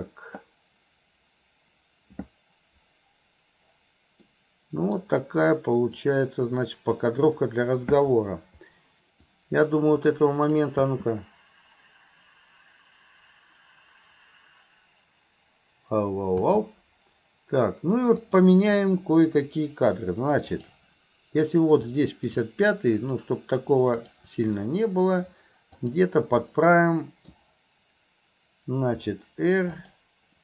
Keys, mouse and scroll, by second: 4.4 middle click, 6.2-10.6 drag, 18.3 click, 20.6 click, 22.0 middle drag, 24.0 click, 24.6-25.3 middle drag, 25.8 click, 26.4-27.3 middle drag.